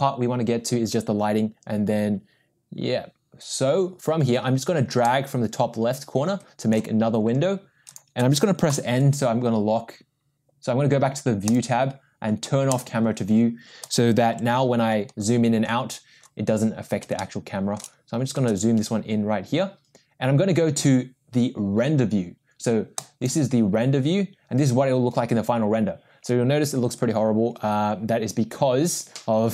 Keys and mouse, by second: 5.1-6.7 drag, 7.9 click, 8.7 n, 12.7 click, 14.5 n, 17.2-17.8 shift+middle drag, 23.1 click.